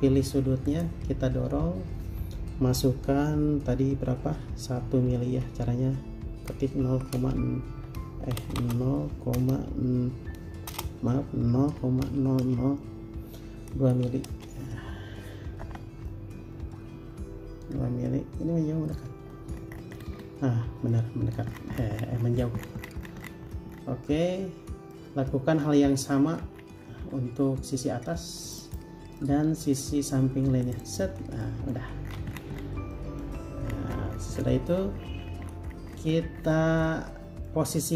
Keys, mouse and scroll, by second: 0.1 typing, 6.5-7.4 typing, 8.8-9.6 typing, 10.9-12.6 typing, 14.1 typing, 14.5 Return, 16.3 middle click, 19.5-20.5 scroll up 1, 21.1 middle click, 21.7-22.8 scroll down 1, 24.3 middle click, 26.1 scroll up 1, 27.9 middle click, 28.8 double click, 29.4 middle click, 31.0 double click, 31.6 middle click, 32.0 space, 32.2 scroll down 1, 33.1 middle click, 33.6 Escape, 33.9 scroll down 1, 34.9 scroll up 1, 37.1 middle click.